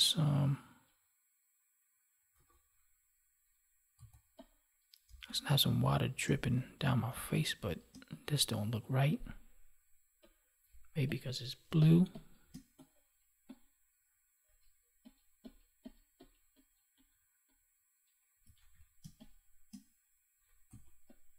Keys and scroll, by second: 5.0 space, 11.6 space, 18.5 ctrl+1.